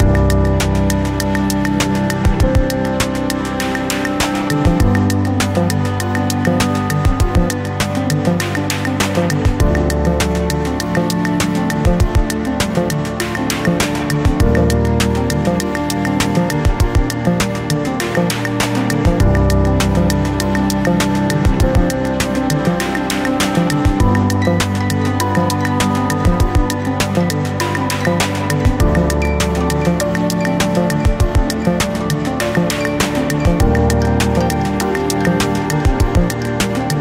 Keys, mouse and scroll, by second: 1.2-7.8 middle drag, 3.6-4.2 scroll up 1, 4.3 r, 8.2 KP_1, 9.4-10.0 scroll down 1, 10.0 KP_3, 10.5 scroll up 1, 11.7-12.8 scroll down 1, 13.1-13.9 scroll up 1, 14.1 middle click, 14.7 scroll up 1, 15.4 scroll down 1, 16.6 Tab, 17.9 middle click, 17.9 scroll up 1, 18.6 click, 19.5-21.0 middle drag, 19.9-20.3 scroll up 1, 21.0 click, 21.7 click, 22.8 KP_0, 24.0 KP_3, 24.5-24.8 scroll down 1, 25.3-25.7 scroll up 1, 26.0-26.5 scroll down 1, 26.5-27.9 scroll up 1, 28.6 click, 29.6 e, 31.5 scroll down 1, 33.4 g, 36.4 r.